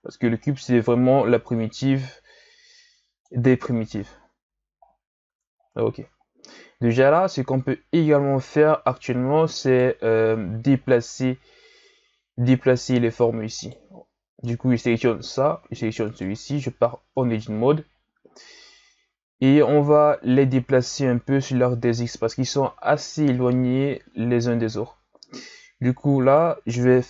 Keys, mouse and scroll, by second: 0.4-3.5 drag, 4.3 KP_1, 4.8-5.3 scroll down 6, 5.3 Tab, 5.6-6.1 scroll down 5, 6.1-6.9 scroll up 4, 6.9-9.7 scroll up 3, 9.7 right click, 12.7 right click, 13.6 right click, 16.1 shift+right click, 17.1 Tab, 17.9-18.2 scroll down 2, 18.2-21.3 ctrl+scroll up 4, 26.2 right click.